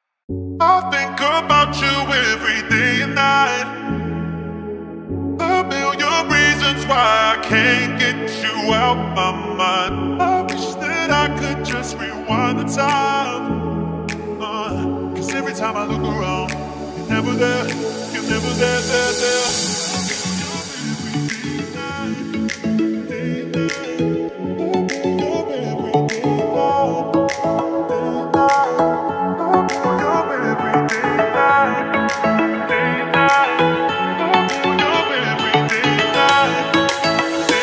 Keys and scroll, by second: 27.1 F3, 32.7 shift+F2.